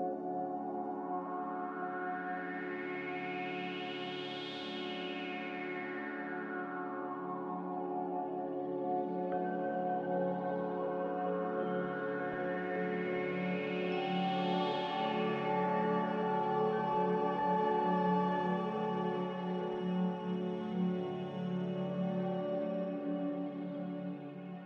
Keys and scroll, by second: 8.2 b, 13.1 a, 14.5 ctrl+c, 18.2 Escape, 21.5 a, 22.3 z.